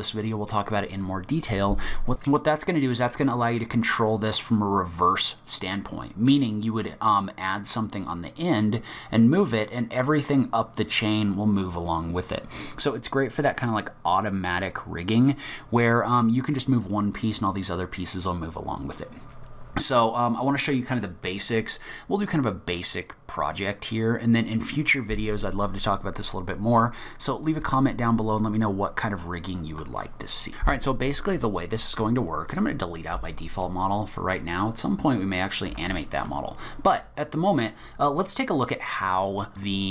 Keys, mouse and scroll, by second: 23.8 middle click, 32.0 click, 33.7 middle click, 35.7 Delete, 38.0-38.5 scroll up 2.